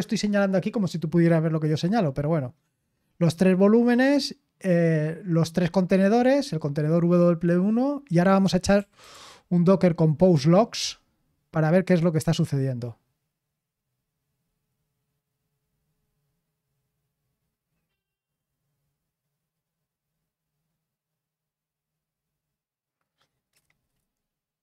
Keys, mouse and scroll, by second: 2.8-4.4 drag, 8.5-10.3 typing.